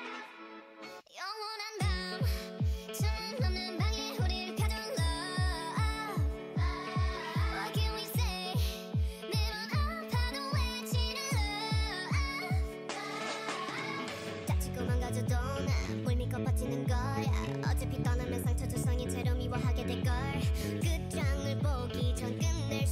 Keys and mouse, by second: 1.6 right click, 2.6 g, 4.5-7.2 drag, 5.6 g, 7.3-8.7 drag, 7.5 g, 8.9-10.6 drag, 9.1 g, 11.0-12.7 drag, 11.2 g, 12.1 g, 12.7 a, 12.8-15.2 drag, 13.9 g, 15.2 g, 15.4-16.6 drag, 16.8 g, 18.4 g, 19.4 g, 20.7 g, 22.1 g.